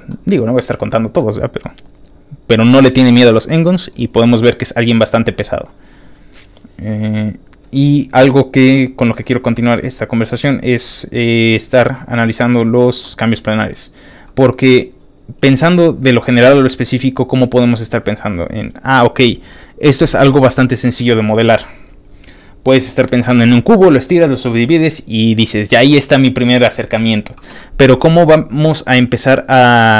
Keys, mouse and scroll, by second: 1.2 middle click, 2.4 scroll down 2, 2.4 scroll up 1, 2.4-3.0 scroll down 1, 3.0 middle click, 3.9 click, 4.6 scroll up 2, 5.0 scroll down 2, 5.7 middle click, 5.8 scroll up 1, 6.1 middle click, 6.8-7.1 scroll down 1, 7.3-8.4 scroll up 6, 8.4 scroll down 1, 8.5-9.7 scroll up 5, 9.9 scroll down 2, 10.2 scroll up 2, 10.5 scroll down 1, 10.9-12.1 middle drag, 12.3 middle click, 13.0 middle click, 13.1 middle click, 13.6 middle click, 14.2 middle click, 14.6-15.6 scroll up 2, 15.8 scroll up 1, 16.3-17.5 scroll down 2, 17.5 click, 18.1 click, 18.7 middle click, 18.7 scroll up 1, 19.0-27.1 middle drag, 19.0-19.4 scroll down 1, 19.4-27.1 scroll up 1.